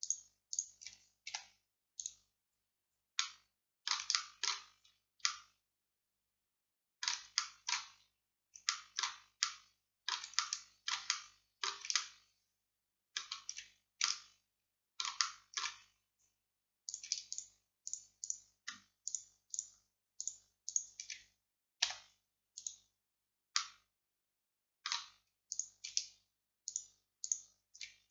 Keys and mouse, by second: 1.4 x, 7.0-8.1 middle drag, 8.1 click, 8.8 middle click, 9.5 middle click, 11.7-14.1 middle drag, 21.9 x, 25.6-26.8 middle drag.